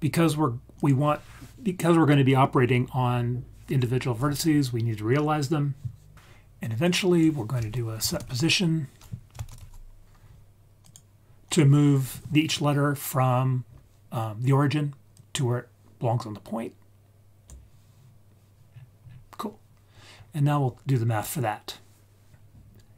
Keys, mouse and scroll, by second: 0.7 click, 4.6-6.1 scroll down 3, 6.1 click, 6.1-6.8 scroll up 3, 6.8-10.9 drag, 11.4 click, 12.6-13.3 scroll down 3, 13.3-14.0 scroll up 3, 15.1 click, 15.4-17.5 drag, 18.6-19.8 scroll down 5, 19.8-22.3 scroll up 4.